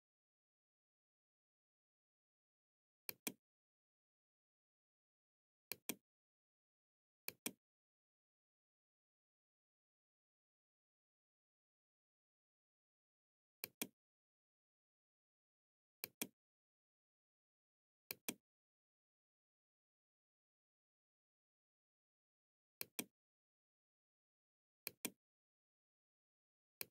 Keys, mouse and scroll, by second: 2.2 click, 4.8 click, 6.4 click, 12.5 click, 15.1 click, 17.2 click, 21.5-22.6 drag, 23.9 click, 25.9 click.